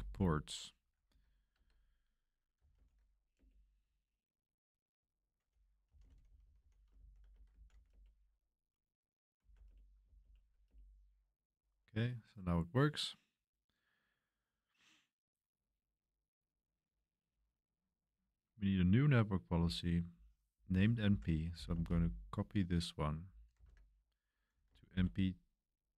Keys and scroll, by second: 0.0-8.0 typing, 3.3 Return, 9.1-9.9 typing, 10.6 Return, 21.3-22.0 typing, 23.3-25.9 typing.